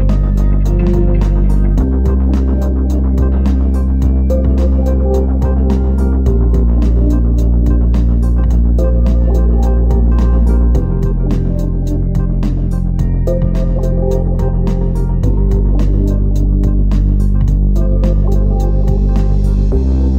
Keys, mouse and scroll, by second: 4.1-4.5 scroll down 3, 5.6 click.